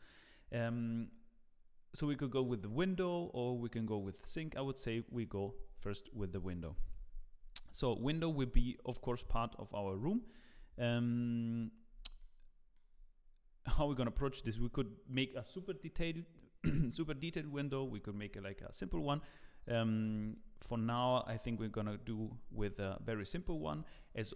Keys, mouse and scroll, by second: 4.6 click, 5.0 middle click, 5.3 scroll up 4, 5.7 shift+middle click, 6.7 KP_Decimal, 7.4 scroll up 2, 7.6 middle click, 8.9 click, 9.8 middle click, 10.4-10.9 scroll up 3, 10.8 shift+middle click, 11.2 click, 11.5-12.1 scroll up 2, 12.2 shift+middle click, 13.6 middle click, 14.0 shift+middle click, 17.5 middle click, 17.9 shift+middle click, 20.1 Tab, 20.3 scroll up 3, 20.6 shift+middle click, 21.3 2, 21.7 alt+click, 22.7 shift+click, 23.6 scroll down 2, 24.0 shift+middle click.